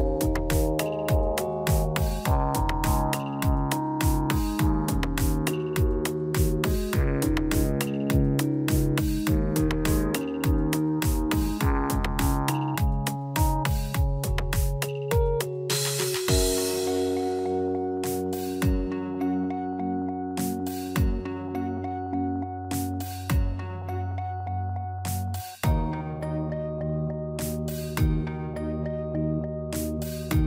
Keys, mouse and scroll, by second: 0.3 middle click, 1.0 i, 7.8 click, 9.3 middle click, 10.6 click, 12.3 middle click, 12.7-13.5 scroll up 1, 13.6 scroll up 1, 14.2 click, 15.4 shift+middle click, 16.6 shift+click, 20.2 x, 24.5 n, 25.2 click, 28.8 click.